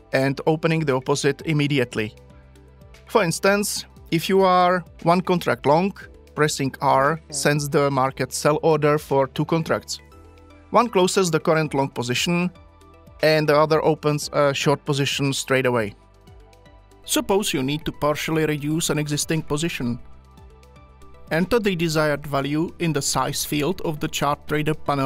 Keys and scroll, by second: 7.0 r, 21.0 c.